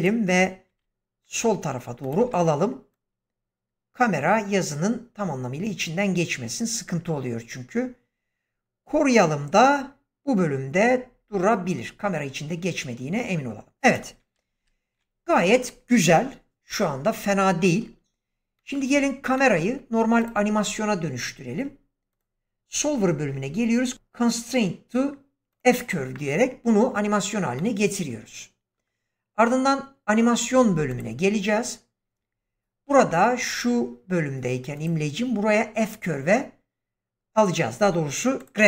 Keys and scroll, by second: 0.6 g, 14.5 shift+Left.